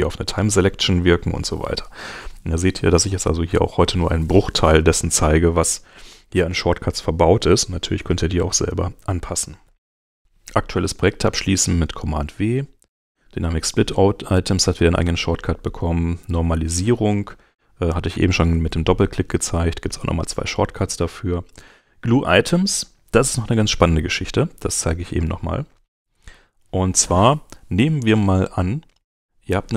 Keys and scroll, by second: 9.6 super+w, 25.3 super+Tab.